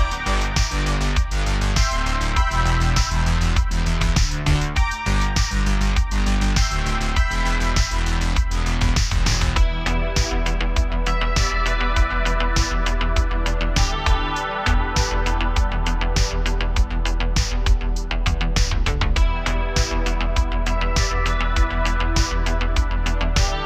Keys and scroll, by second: 6.2 super+z, 13.3 x, 14.5 BackSpace, 15.9-16.6 typing, 23.1 Return.